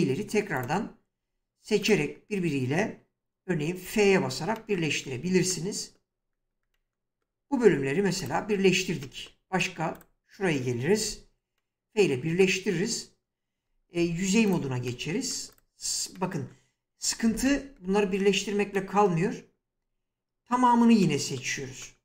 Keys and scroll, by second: 3.9 f, 11.0 f, 14.0 3.